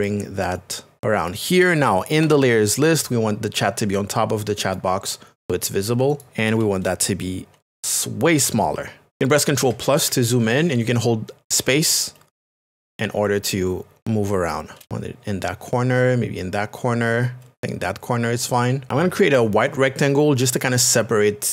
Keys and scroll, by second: 2.2 Return, 8.6 alt+t, 9.1 Return, 11.6 KP_Add.